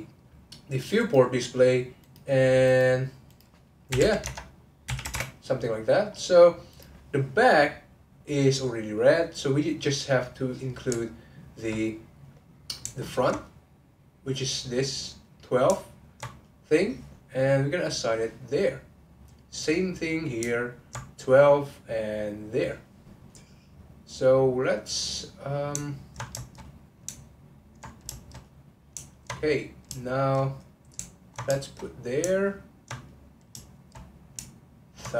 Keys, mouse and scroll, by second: 0.5-1.0 scroll up 1, 1.0-2.1 drag, 2.6 click, 6.0-6.7 scroll up 1, 6.7 click, 8.3-10.2 middle drag, 10.2 click, 11.4 alt+click, 12.0 click, 12.2 middle click, 13.1 ctrl+click, 14.2 middle click, 15.0 click, 15.2 middle click, 16.0 ctrl+click, 16.5 middle click, 17.4 click, 18.0 click, 18.6-19.6 middle drag, 19.6 click, 19.8 middle click, 20.7 ctrl+click, 21.9 click, 22.4 click, 22.9-23.9 middle drag, 23.9 click, 24.8 click, 25.1 middle click, 26.0 ctrl+click, 26.4 shift+click, 26.7 middle click, 27.5 ctrl+click, 28.1 shift+click, 28.5 middle click, 29.1 ctrl+click, 29.4 middle click, 30.2 shift+click, 30.4 middle click, 31.2 ctrl+click, 31.6 shift+click, 31.9 middle click, 32.7 ctrl+click, 33.1 middle click, 33.7 shift+click, 34.0 middle click, 34.7 ctrl+click.